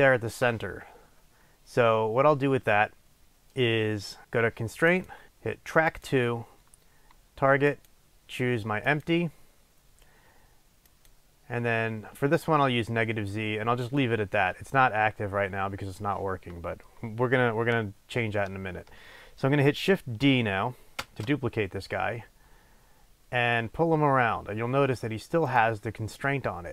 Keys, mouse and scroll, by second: 5.1-11.2 drag, 21.2 shift+d, 26.0 click.